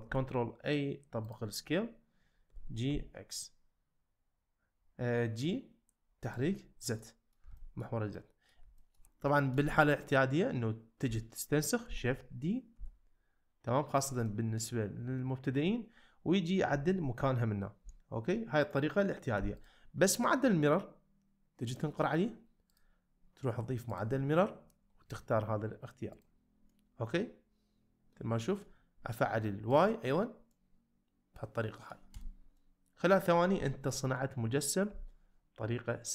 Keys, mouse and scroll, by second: 0.1 ctrl+a, 2.5 g, 2.9 z, 7.0-7.3 middle drag, 7.6 shift+middle drag, 8.1-8.5 middle drag, 8.8 shift+click, 9.3 shift+click, 9.4 shift+middle drag, 11.9 shift+d, 12.7 x, 14.3-15.6 middle drag, 16.7 g, 17.8 y, 18.6-19.4 right drag, 19.4 x, 20.1-20.7 middle drag, 22.9-24.0 drag, 26.7-28.6 middle drag, 29.7 click, 30.5-31.9 middle drag, 32.6-33.1 middle drag, 33.7 ctrl+middle click, 34.2-34.8 middle drag, 36.0-36.1 middle drag.